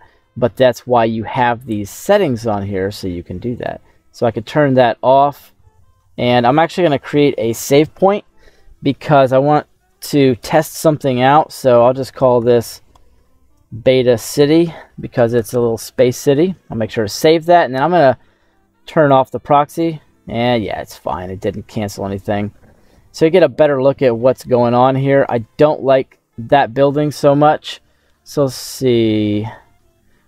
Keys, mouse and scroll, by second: 0.7 middle click, 3.5 click, 4.1 scroll down 1, 4.1 middle click, 7.3 ctrl+s, 19.1 click, 19.6 middle click, 20.6 scroll up 2, 20.9-23.7 middle drag, 24.1 middle click, 25.2 right click, 25.7 scroll down 2.